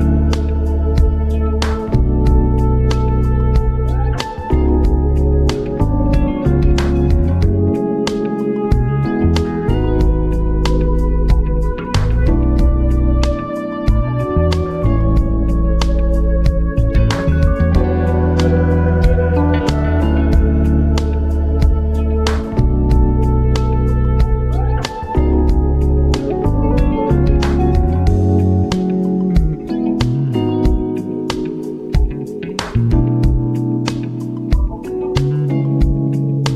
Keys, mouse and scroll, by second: 5.8-14.1 drag, 14.5-17.4 drag, 17.4 click, 19.8-33.8 drag, 35.1 b, 35.3 ctrl+alt+scroll up 1, 36.3 ctrl+BackSpace.